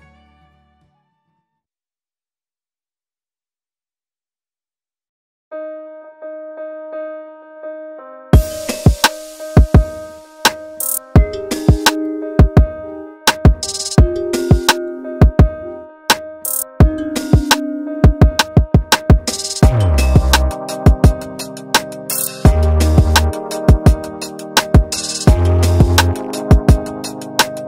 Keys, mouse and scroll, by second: 0.1 click, 1.2 middle click, 2.7 middle click, 4.3 middle click, 6.0 click, 6.2 click, 9.0 click, 9.8 KP_7, 11.0-12.1 scroll up 3, 12.4 shift+d, 13.6 Tab, 14.1 shift+d, 16.2 shift+d, 17.4 middle click, 17.4-17.8 scroll up 1, 17.9-18.2 scroll down 2, 18.2 middle click, 19.7 click, 22.0 click, 22.2 click, 22.8 middle click, 25.3 click, 25.6 middle click, 26.3 r.